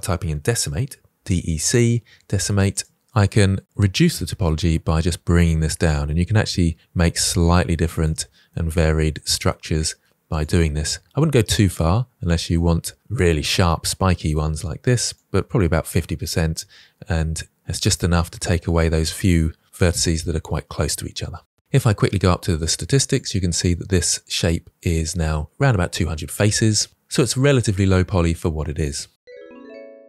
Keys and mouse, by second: 3.4-8.0 drag, 8.4-9.4 middle drag, 10.3-12.9 drag, 13.2-14.5 middle drag, 15.5-18.3 drag, 18.7-21.6 middle drag, 22.0-23.4 drag, 26.9-28.3 middle drag.